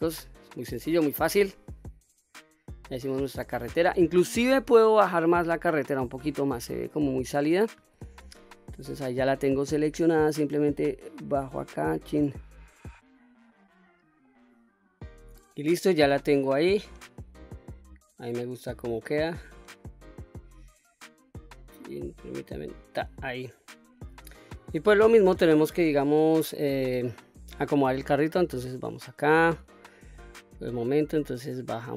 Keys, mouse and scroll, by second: 0.3-0.8 scroll down 1, 0.8-4.3 middle drag, 4.7 click, 5.1-5.8 scroll up 2, 5.8 middle click, 6.4 click, 7.7 Tab, 8.8 middle click, 10.2 click, 12.7-13.2 scroll up 2, 13.2-14.0 middle drag, 15.5-16.6 middle drag, 16.8 middle click, 17.0-17.4 scroll down 1, 17.4-19.7 middle drag, 20.8 click, 23.3-24.6 middle drag, 24.6-25.7 scroll up 2, 25.9 KP_3, 27.4 Tab, 27.9 click, 28.5-29.6 scroll up 3, 29.7-30.1 shift+middle drag, 31.1 click.